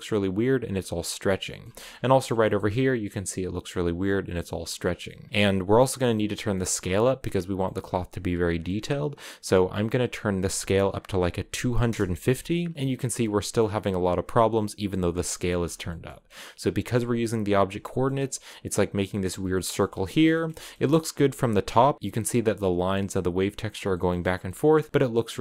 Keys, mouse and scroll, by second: 0.3 scroll down 3, 0.5-1.6 middle drag, 1.6-2.0 scroll up 3, 2.0 shift+middle click, 4.2 scroll down 4, 4.6 middle click, 5.3 click, 6.2 middle click, 6.5-7.4 scroll up 1, 7.4-11.6 middle drag, 11.6 click, 12.5-14.8 middle drag, 14.8-15.6 scroll up 4, 15.2 shift+middle click, 15.6 shift+middle click, 16.7 click, 17.0 click, 17.6 middle click, 17.9-18.7 scroll up 1, 19.1-19.8 scroll down 6, 19.2 middle click, 19.8-20.9 shift+middle drag, 20.9-23.2 scroll up 4, 23.2 scroll up 1, 23.3-23.7 scroll down 6, 23.7-24.9 shift+middle drag, 24.9-25.4 scroll up 2.